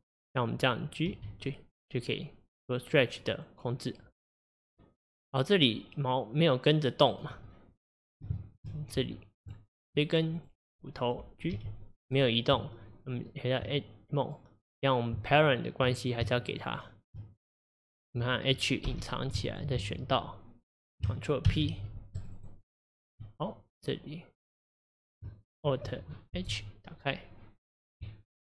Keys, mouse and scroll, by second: 0.3 click, 1.1 g, 8.4 shift+middle drag, 8.6-9.3 shift+scroll up 1, 9.3 scroll up 1, 9.9 click, 11.5 g, 13.6 Tab, 14.3 click, 16.7 shift+click, 17.4 click, 18.9 h, 19.6 shift+click, 22.4-26.3 drag, 26.3 alt+h.